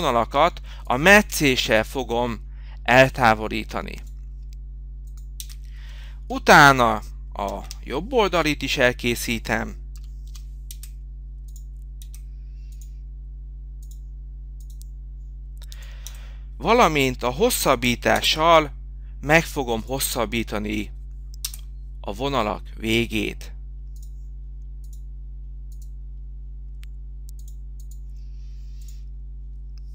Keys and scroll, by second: 1.4 Return.